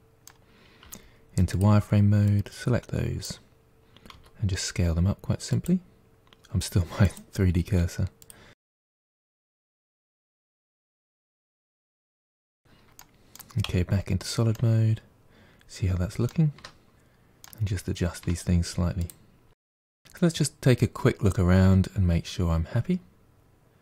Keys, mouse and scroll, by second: 0.8 z, 2.3 click, 4.2 s, 7.1-8.6 drag, 8.6-11.8 typing, 10.1 middle click, 13.0 middle click, 13.7 z, 14.6-16.6 middle drag, 16.6 Tab, 17.0 g, 17.7 middle click, 18.1 scroll up 4, 18.2 Tab, 18.4 click, 18.6 middle click, 19.0 g, 19.6 Tab, 19.6 scroll down 1, 19.8-22.9 middle drag.